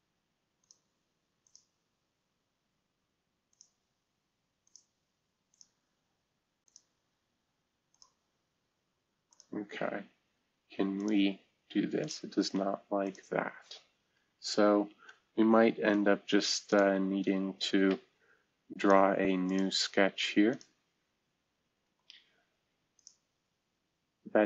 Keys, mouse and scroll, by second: 3.5 click, 4.6 click, 7.9 click, 9.2 click, 14.1 Delete, 15.8 Return, 16.9 Delete, 21.1-21.7 scroll down 1, 21.7 space.